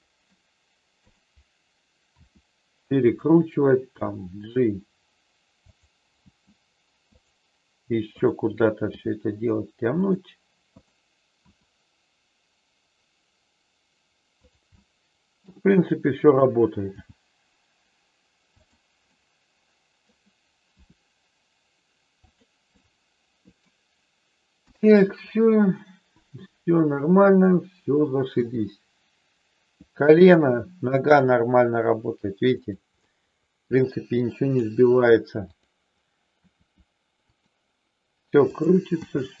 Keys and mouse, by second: 1.0 click, 2.2 r, 3.9 g, 6.1 g, 7.1 click, 8.1 click, 11.6 r, 14.7 middle click, 16.2 click, 17.1 g, 18.5 click, 19.1 middle click, 20.7 r, 22.7 middle click, 24.6 KP_1, 27.2 click, 28.4 g, 32.6 click, 33.0 middle click, 34.1 middle click, 35.5 click, 36.4 r, 37.2 click, 38.5 click, 39.0 g.